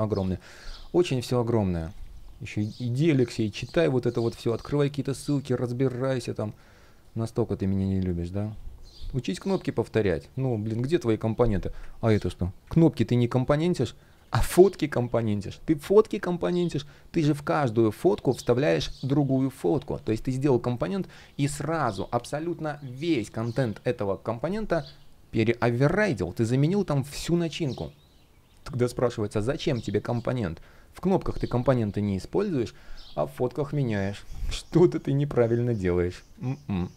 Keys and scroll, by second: 10.1 shift+щ, 11.1 shift+щ, 12.4 super+\, 30.6 shift+щ.